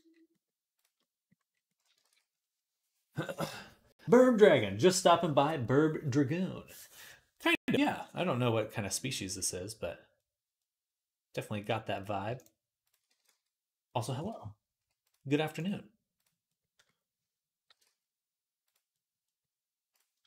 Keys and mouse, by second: 0.0 middle click, 0.1 click, 0.8 click, 0.9 click, 1.3 click, 1.6 click, 1.9 ctrl+s, 7.9 click, 8.5 click, 9.0-11.8 drag, 11.8 shift+middle click, 12.2 shift+click, 12.3 shift+middle click, 12.6 shift+click, 12.8-14.8 middle drag, 12.9 g, 14.8-18.7 drag, 17.5 g, 18.7 middle click, 20.1 ctrl+Tab.